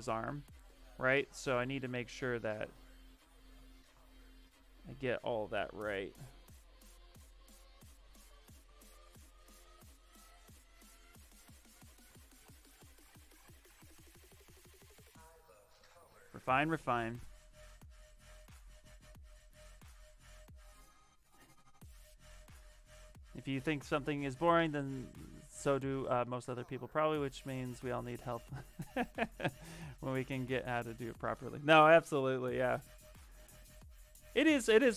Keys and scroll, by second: 3.6 alt+Tab, 7.2 s, 7.9 s, 9.1 s, 12.2 s.